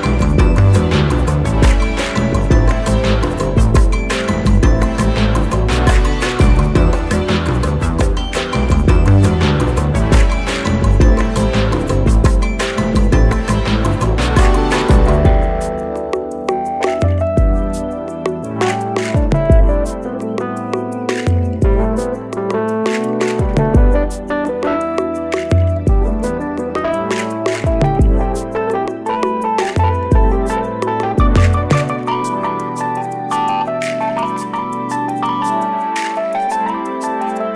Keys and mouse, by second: 4.5 Up, 5.5 click, 12.3 click, 13.3 shift+click, 15.3 i, 16.1 click, 18.6 click, 21.1 shift+click, 21.9 i, 23.3 click, 25.8 ctrl+z, 26.1-27.9 drag, 31.1 click, 34.4-37.0 drag.